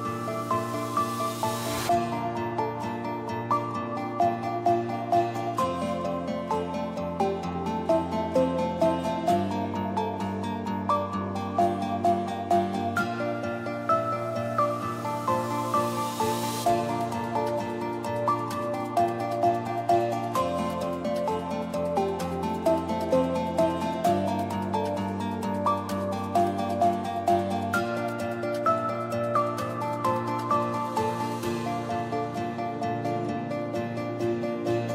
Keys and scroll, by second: 17.3-18.1 typing, 22.8 Return, 22.8 5, 23.1 Return, 24.5-25.4 typing, 30.7 space, 31.2 a, 34.2 a.